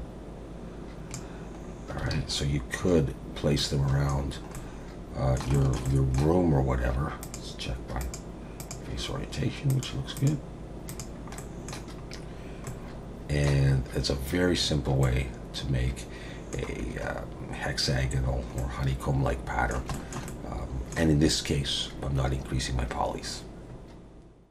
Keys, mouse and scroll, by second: 1.6 scroll up 2, 2.1 alt+a, 2.4-2.8 scroll down 2, 2.8-3.6 scroll up 3, 3.6 middle click, 4.3 scroll down 2, 4.5 middle click, 5.5 shift+middle click, 5.8 middle click, 7.2 click, 10.2 click, 10.9 click, 11.4 middle click, 12.0-12.4 scroll up 1, 12.4 scroll down 2, 12.7 middle click, 13.7-14.5 scroll up 3, 15.0 middle click, 17.1-18.1 scroll up 1, 18.1-18.6 scroll down 3, 18.6 middle click, 19.9 shift+middle click, 20.3 middle click.